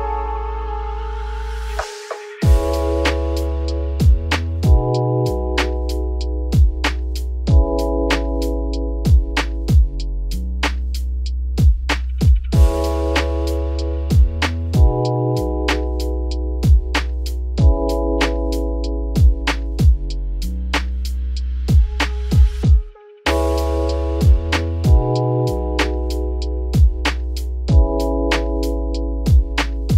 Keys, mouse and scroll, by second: 2.4 z, 2.6 scroll down 5, 2.7 middle click, 3.1 Tab, 3.3-3.7 scroll down 5, 3.7 ctrl+s, 4.0-4.7 shift+middle drag, 4.7 click, 5.2 scroll down 4, 5.3-8.1 middle drag, 8.1-8.6 scroll down 1, 8.6-11.8 middle drag, 14.4 click, 14.7-16.6 middle drag, 16.6-17.0 scroll up 3, 17.0-17.7 middle drag, 17.7-18.2 scroll up 4, 18.2 scroll down 2, 18.3 middle click, 18.7-19.3 scroll up 2, 19.3 click, 19.6-20.1 middle drag, 20.1 shift+click, 21.3 ctrl+KP_Add, 22.0 middle click, 22.5 ctrl+s, 23.2 click, 24.3 click, 26.0 click, 27.5 ctrl+a, 27.7 ctrl+a, 28.7 click, 29.7 x.